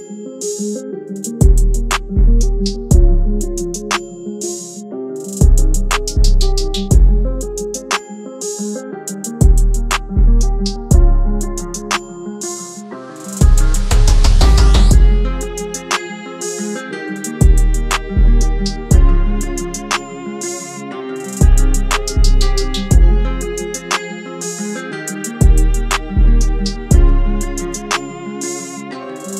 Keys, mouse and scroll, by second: 28.9-29.2 alt+scroll up 1.